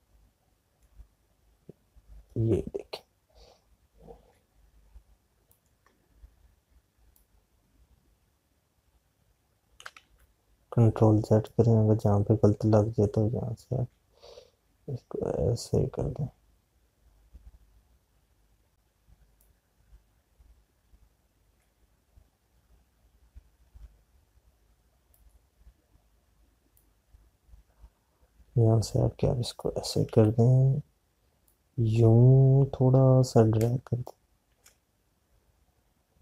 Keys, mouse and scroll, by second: 1.5 alt+click, 8.6 click, 11.1 z, 12.5 click, 20.9 click, 26.3 click, 32.2 z, 33.2 click, 34.6 space.